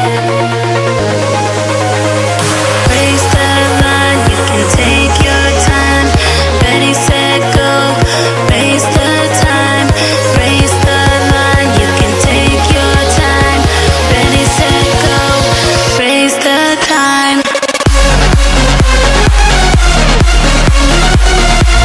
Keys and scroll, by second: 3.0 space, 12.3 ], 12.7 ], 13.8 [, 15.1 [, 16.1 ], 16.4 ], 17.4-21.8 typing.